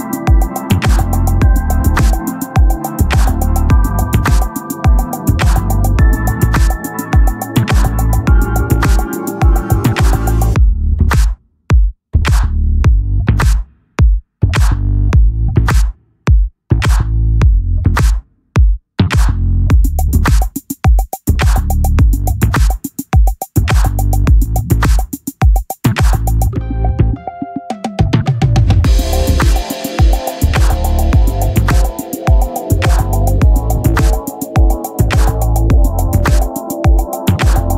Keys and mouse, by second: 10.5 click, 14.4 click, 16.8 click, 20.2 click, 24.0 click, 25.8 click, 30.1 click.